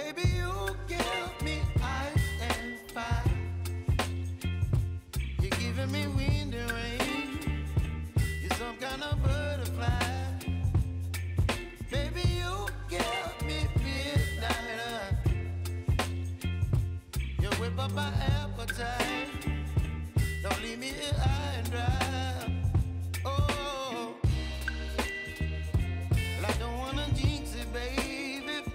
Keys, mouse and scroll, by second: 1.8 ctrl+d, 2.8-4.3 shift+drag, 4.7 ctrl+t, 4.9 ctrl+click, 5.4 ctrl+a, 6.5 shift+w, 8.7-9.6 typing, 13.4 ctrl+a, 14.4 w, 14.6 w, 15.1 w, 16.4-20.5 typing, 22.0-23.5 typing, 24.9 click, 25.5 Up, 28.5 shift+click.